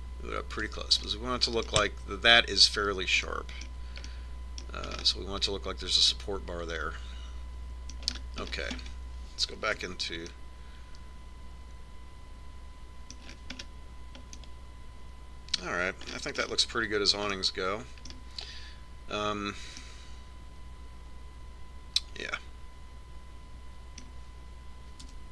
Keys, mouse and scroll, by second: 2.2-4.0 middle drag, 4.4-9.2 middle drag, 9.2-10.9 middle drag, 10.9 Tab, 14.4-22.8 middle drag, 22.9 middle click.